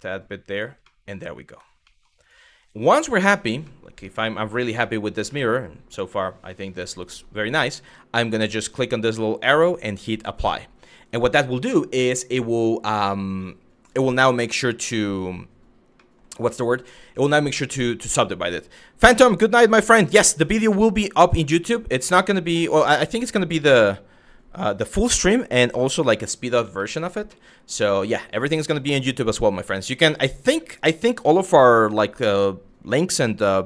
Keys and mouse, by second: 0.1 click, 0.5 middle click, 1.1 Tab, 1.5 middle drag, 3.3-4.4 middle drag, 5.1-6.9 middle drag, 7.8-10.2 drag, 15.6 middle drag, 25.9 middle drag, 26.5 shift+middle click, 27.0-28.1 middle drag.